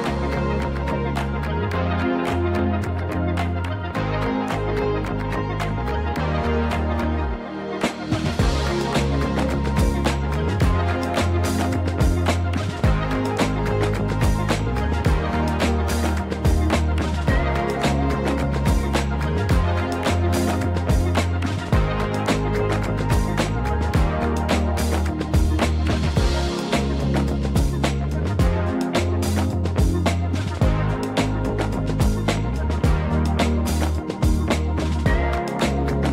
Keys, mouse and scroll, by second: 2.7-14.4 drag, 14.7-17.6 drag, 19.6 click, 20.3 click, 20.8 click, 22.7 click, 25.1 click, 26.3-27.3 drag, 28.4 Tab, 28.9 click, 30.4 ctrl+l, 30.8 p, 32.3 Tab, 32.8 click, 33.3 click, 34.5 click.